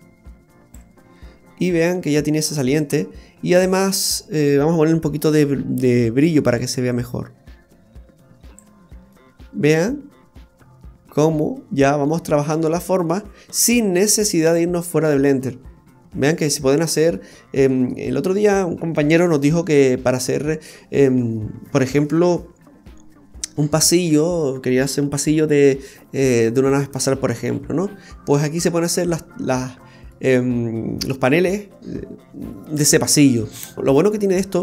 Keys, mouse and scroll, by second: 1.2 middle click, 3.1-3.8 scroll down 8, 3.7 middle click, 6.5 click, 9.1 middle click, 13.4-14.1 scroll down 7, 14.5 middle click, 14.5-15.5 scroll down 2, 17.3 shift+middle click, 18.0-18.5 scroll down 1, 18.5-19.3 scroll down 1, 19.9 scroll up 1, 20.0-20.4 scroll down 1, 21.2-21.6 scroll up 2, 28.9-29.2 scroll up 2, 29.2-30.1 scroll down 2, 29.6 middle click, 31.6-32.3 scroll down 1.